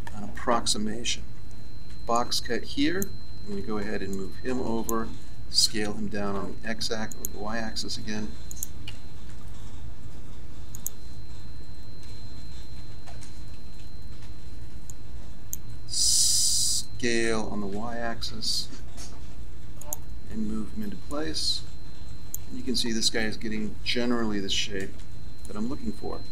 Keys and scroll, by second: 5.6 s, 12.0 ctrl+z, 17.2 s, 23.6 a.